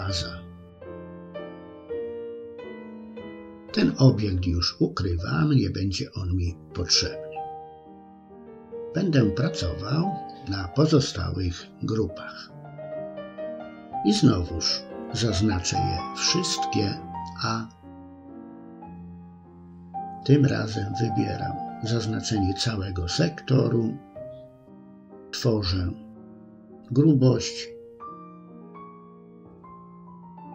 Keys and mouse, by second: 0.5 l, 1.8 h, 2.8 shift+middle click, 3.4 middle click, 4.4 middle click, 5.7-6.9 middle drag, 7.8-8.8 middle drag, 15.5 a, 17.1 i, 20.2 click, 21.7 click, 26.3-30.5 drag.